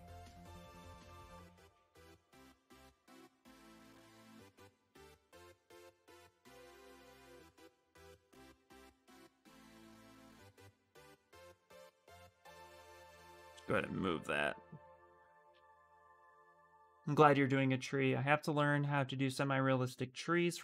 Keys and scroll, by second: 0.7 x, 2.8 q, 9.7 ctrl+z, 10.3 q, 11.3 ctrl+z, 11.9 q, 12.8 w.